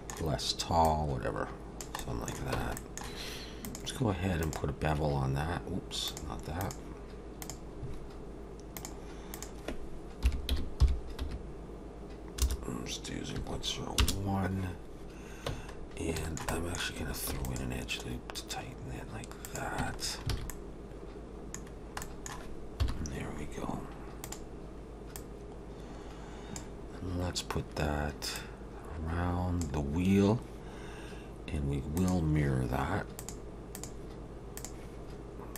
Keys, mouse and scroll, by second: 0.8 click, 2.0 middle click, 2.5 Tab, 2.8 middle click, 3.6 click, 6.1 click, 8.7 click, 9.3 click, 15.5 Tab, 15.8-16.2 scroll up 2, 16.2 shift+middle click, 16.5 middle click, 17.3 ctrl+r, 19.8 Tab, 20.0 scroll down 3, 20.3 alt+a, 20.5 middle click, 21.7-22.0 scroll down 2, 22.0 middle click, 22.8 KP_7, 23.6-24.2 scroll up 2, 24.2 click, 24.2-25.0 scroll up 1, 25.1 click, 26.9-28.2 scroll down 2, 28.2 scroll down 1, 28.3 click, 32.0 click, 33.2 click.